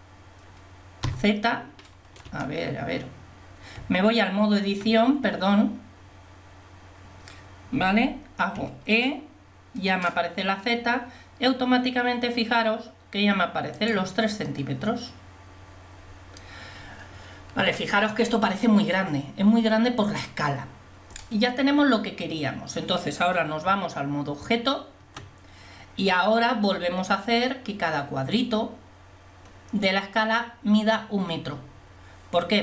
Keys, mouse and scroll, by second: 1.1 z, 2.4 Escape, 3.8 Tab, 8.6 e, 23.9 Tab.